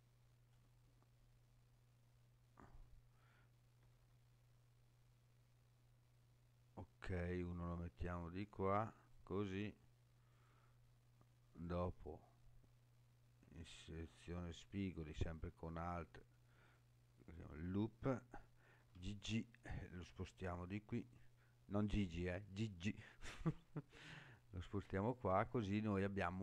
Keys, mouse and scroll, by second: 0.5 right click, 3.8 g, 4.0 g, 9.0 click, 10.3 click, 16.6 alt+click, 18.8 g, 18.9 g, 23.7 click, 24.7 scroll down 2, 25.4 scroll up 2.